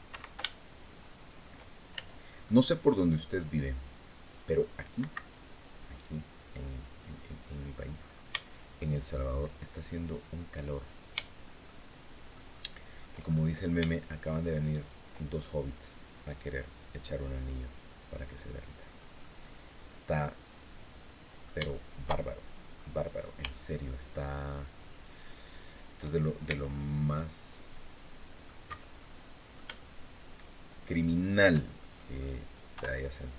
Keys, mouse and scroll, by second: 0.2-1.3 shift+middle drag, 1.7 shift+c, 2.2-4.5 shift+middle drag, 4.7 Escape, 7.2 click, 7.7-8.1 scroll up 1, 8.2 shift+middle click, 9.7 shift+right click, 10.5-10.9 shift+scroll down 3, 11.0 shift+click, 11.7 shift+click, 12.9-13.4 shift+scroll up 3, 14.5 shift+right click, 15.1-15.4 shift+scroll down 3, 16.6-17.1 scroll down 2, 17.2-18.9 drag, 21.3 shift+click, 21.4 shift+click, 22.5-23.0 scroll up 2, 23.2 shift+click, 24.8 shift+right click, 26.2 c, 26.5-28.4 drag, 28.4 Escape, 28.7 click, 30.8 shift+right click, 31.3 shift+scroll down 1, 31.7 shift+middle click, 32.5 KP_7.